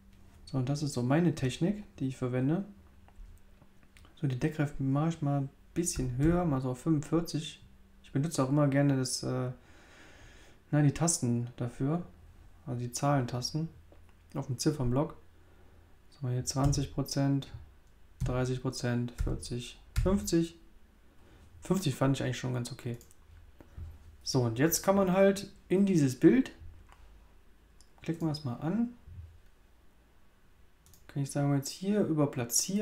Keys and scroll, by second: 5.9 4, 6.2 5, 16.6 2, 18.2 3, 19.1 4, 19.9 5.